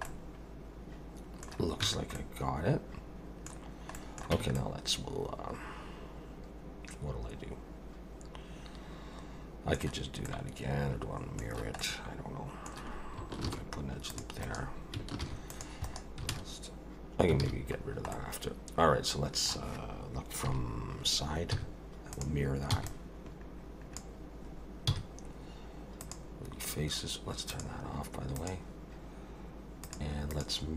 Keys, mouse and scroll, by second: 0.1 middle click, 1.8 Tab, 2.2 middle click, 3.6 scroll down 2, 3.9 middle click, 4.3 Tab, 4.6 middle click, 10.3 middle click, 11.8 middle click, 13.5 ctrl+r, 15.2 ctrl+r, 17.4 alt+a, 17.8-18.2 scroll down 2, 18.1 middle click, 20.5 KP_3, 21.5 z, 22.7 b, 24.9 x, 27.5 click, 28.4 click, 29.8 click, 30.3 click.